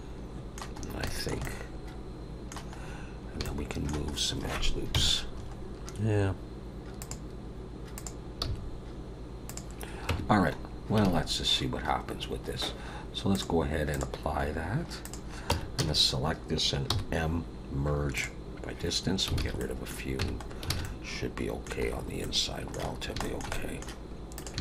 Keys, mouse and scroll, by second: 0.8 scroll up 3, 1.0 shift+middle click, 1.4 middle click, 2.8 scroll up 2, 3.4 shift+middle click, 4.1 scroll up 1, 4.9 KP_1, 5.4-5.9 scroll up 5, 7.0 click, 7.9 click, 8.4 g, 10.1 Tab, 10.2 scroll down 5, 11.0 alt+a, 12.5-13.0 scroll up 3, 13.3 click, 14.4-15.0 scroll down 1, 15.0 click, 15.0-15.5 scroll down 1, 15.5 Tab, 15.7 a, 16.8 m, 19.4 alt+a, 19.5 middle click, 20.2 Tab, 20.4 scroll down 4, 20.7 alt+a, 20.8 middle click, 21.9 scroll up 3, 22.2 middle click, 22.9 scroll down 2, 23.2 shift+middle click, 23.5 middle click, 24.3 click.